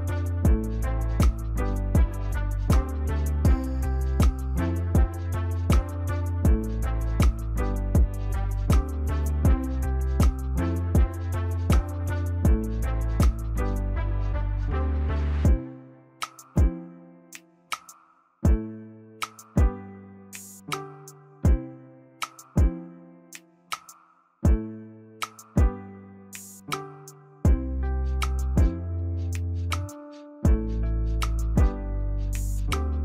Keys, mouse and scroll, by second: 4.5 ctrl+j, 5.1 ctrl+click, 10.8 ctrl+click, 17.2 ctrl+j, 18.9 ctrl+click.